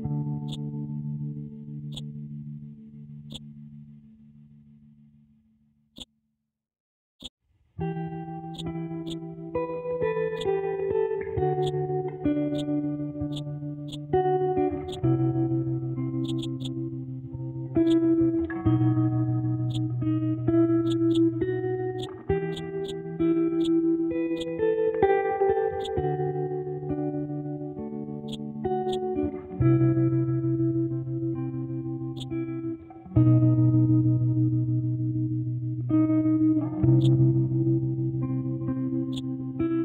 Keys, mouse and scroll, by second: 5.9 click, 6.6 scroll up 1, 7.2-15.5 ctrl+drag, 15.5-16.1 scroll down 1, 16.2 click, 17.8 click, 19.6 click, 20.8-32.1 drag, 32.1-35.9 drag, 35.9 ctrl+z, 37.0-39.8 drag.